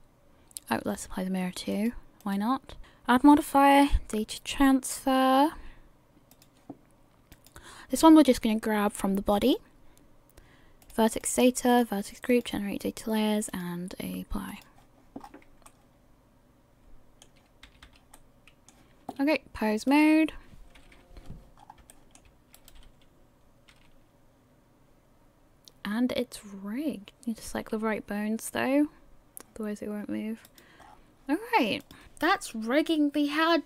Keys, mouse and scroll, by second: 1.7 click, 2.8 click, 3.3 click, 7.3 click, 10.8 click, 11.2 click, 12.3 click, 13.5 click, 15.2-15.7 scroll up 4, 15.7 middle click, 17.0 middle click, 17.7 a, 17.9 a, 18.1 middle click, 19.9 click, 20.9 KP_1, 21.6 scroll up 4, 21.9 shift+middle click, 23.4 right click, 23.7 r, 27.1 right click, 27.1 r, 27.5 r, 30.8 scroll down 1, 31.8 click, 31.8 scroll down 5.